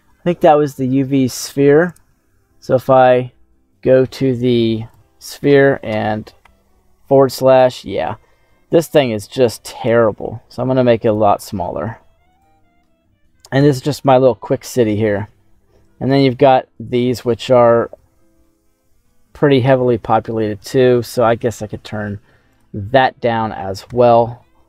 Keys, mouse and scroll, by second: 1.8 click, 4.8 click, 6.3 /, 8.6 s, 11.0 click, 11.3 ctrl+a, 13.5 /, 14.0 middle click, 15.3 scroll up 2, 16.0 right click, 17.0-17.6 scroll down 2, 17.6-18.8 middle drag, 22.4 click, 23.8 KP_Divide.